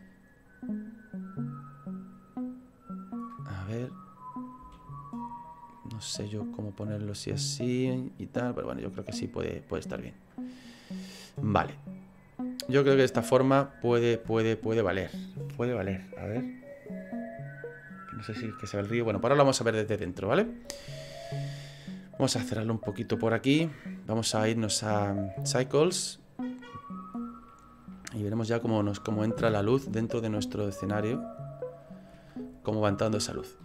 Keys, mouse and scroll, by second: 4.6 s, 6.8 click, 8.7 click, 10.9-11.6 scroll down 2, 11.6 middle click, 11.6 scroll down 1, 16.6 click, 23.0 click, 25.2 click, 26.9 scroll down 3, 28.0 middle click, 28.0 scroll down 1, 29.5 KP_0, 30.5 shift+middle click, 30.6 shift+middle click.